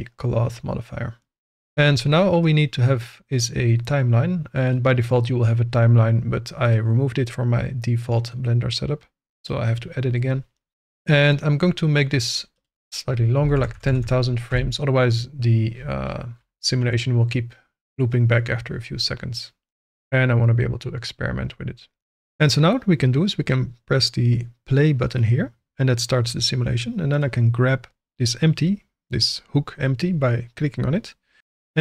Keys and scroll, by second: 13.4 1, 13.5 0, 14.5 Return.